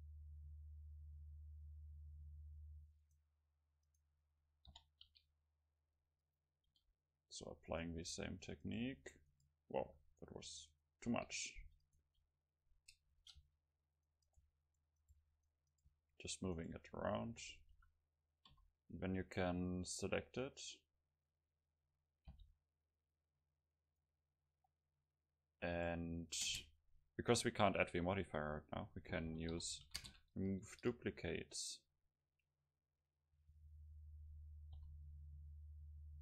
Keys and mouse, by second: 0.1-1.3 middle drag, 3.2-5.1 drag, 4.0-5.7 right drag, 4.8 o, 5.1 r, 6.4-8.3 drag, 6.9 s, 7.8 right click, 8.1 s, 9.0 s, 9.9 s, 10.4 right click, 11.2 r, 11.6 click, 12.1 h, 12.2-13.6 drag, 12.2-13.6 right drag, 13.2 ctrl+z, 13.4 g, 14.3-16.1 right drag, 14.5-18.6 typing, 14.8-18.6 drag, 16.2-19.9 right drag, 22.4 c, 25.9-28.0 drag, 26.5 space.